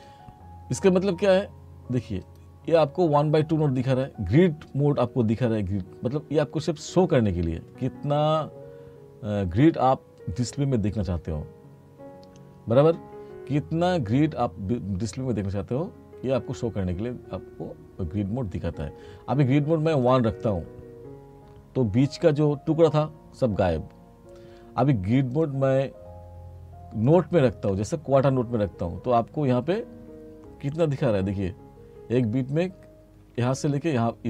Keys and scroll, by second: 30.9 t, 33.3 t.